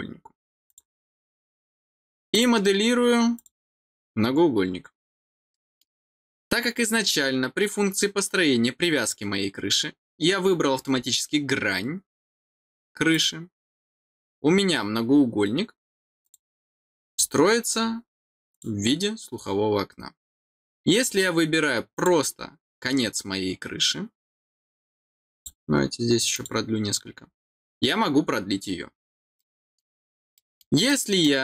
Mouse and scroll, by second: 0.6 click, 2.3 click, 3.3 click, 5.5 middle click, 10.6-11.0 scroll down 2, 13.1 click, 14.5 scroll down 1, 16.2 click, 17.0 click, 17.7 scroll down 1, 18.5 click, 21.9 click, 25.3 click, 26.3 click, 27.2 middle click, 28.0 scroll down 2, 29.3 middle click, 30.3 middle click, 30.8 middle click.